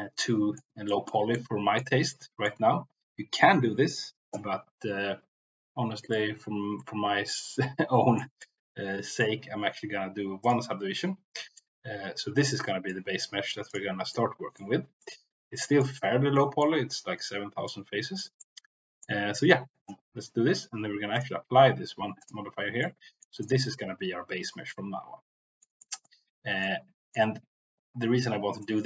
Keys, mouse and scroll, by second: 0.8 middle click, 1.3 middle click, 2.0 middle click, 6.0-8.1 middle drag, 8.4 middle click, 10.4 drag, 11.6-12.9 middle drag, 13.6 click, 14.0-14.5 middle drag, 15.0-15.9 middle drag, 16.3 middle click, 17.7-18.2 middle drag, 18.4 middle click, 21.0-22.3 drag, 22.8 middle click, 23.4 click, 23.6 Tab, 24.6 middle click, 25.7 middle click, 26.6 middle click, 28.6 middle click.